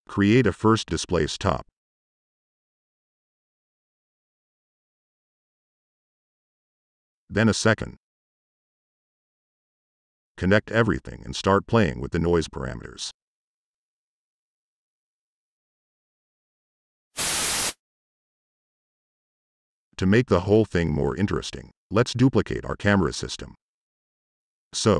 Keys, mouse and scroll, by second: 0.2 Delete, 0.2 click, 0.3 Tab, 1.8 click, 2.4-2.7 drag, 3.0-3.3 drag, 4.0 click, 4.8 click, 6.3 click, 7.1 c, 7.2 ctrl+v, 7.4 click, 8.4 click, 9.0 click, 9.7 click, 10.6 click, 11.7 click, 11.9 click, 12.2 click, 12.5-13.5 drag, 19.9 ctrl+c, 21.0 click, 21.1 ctrl+v, 21.4 drag, 21.8 click.